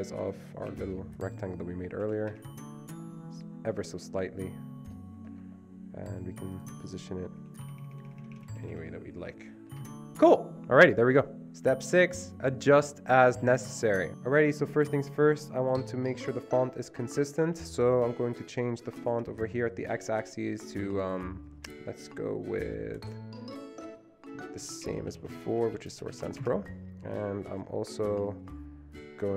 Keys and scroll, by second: 0.8 shift+Down, 2.2 Escape, 2.5 shift+Up, 7.8 Up, 7.9 Up, 8.1 Up, 8.2 Up, 8.3-8.8 Up, 9.9 Escape, 24.5-26.8 typing.